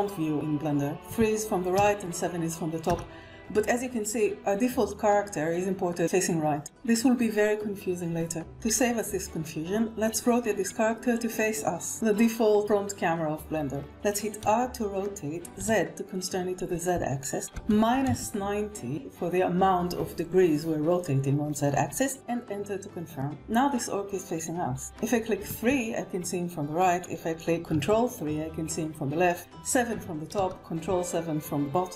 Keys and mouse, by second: 1.3 KP_3, 2.0 KP_7, 3.1 KP_1, 13.9 r, 15.0 z, 17.3 -, 17.7 9, 17.8 0, 22.2 Return, 25.5 KP_3, 27.9 ctrl+KP_3, 29.9 KP_7, 31.0 ctrl+KP_7.